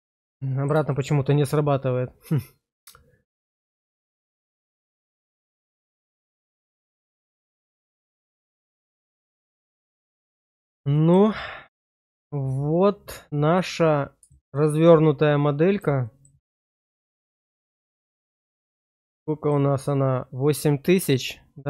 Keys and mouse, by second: 0.2 middle click, 0.8 shift+middle click, 5.5 click, 7.3 middle click, 7.8 shift+middle click, 10.2 middle click, 10.9 shift+middle click, 12.4-14.2 middle drag, 14.4 shift+middle click, 14.9 middle click, 15.9 shift+middle click, 16.4-17.8 middle drag, 18.7 shift+middle click, 19.2 middle click.